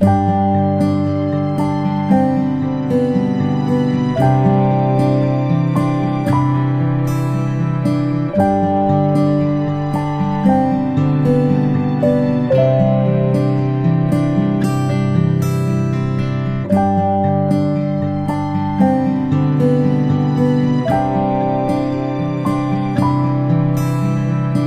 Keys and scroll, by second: 14.5 ctrl+p.